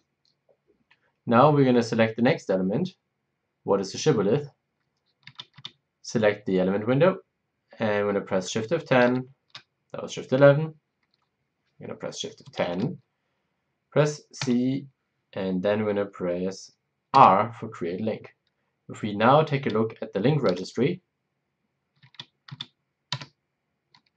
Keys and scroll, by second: 9.0 shift+F11, 12.6 shift+F10, 14.4 c, 17.1 c, 20.4 e, 23.1 s.